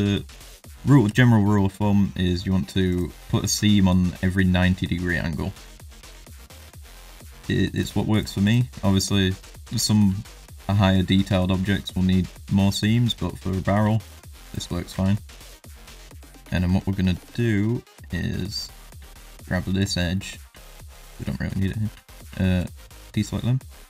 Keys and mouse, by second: 4.2 middle click, 5.1 middle click, 5.7 shift+middle click, 6.7 alt+shift+click, 7.2 alt+shift+click, 7.7 alt+shift+click, 8.4 alt+shift+click, 8.8 middle click, 9.5 shift+middle click, 9.8 ctrl+middle click, 10.4 alt+shift+click, 10.8 middle click, 11.2 shift+middle click, 11.7 middle click, 12.9 shift+middle click, 13.4 middle click, 14.1 alt+shift+click, 15.1 middle click, 16.0 middle click, 16.5 shift+middle click, 16.8 middle click, 17.4 shift+middle click, 17.8 middle click, 19.8 shift+click, 20.1 middle click, 20.6 shift+click, 20.9 middle click, 21.3 shift+click, 21.5 middle click, 22.6 shift+click, 22.9 shift+click.